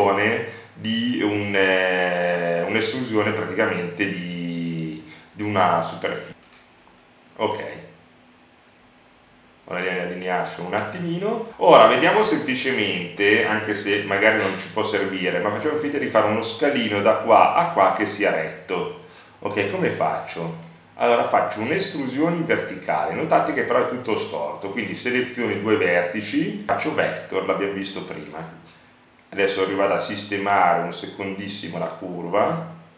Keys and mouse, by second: 5.1 click, 7.4 KP_1, 14.0 click, 14.9 e, 15.5 click, 17.9-20.0 drag, 20.5-23.0 right drag, 24.0 click, 24.0 right click, 24.3 click, 24.3 right click, 24.5 click, 24.9-26.1 right drag, 26.7 right click, 27.6 e, 31.5-32.9 drag.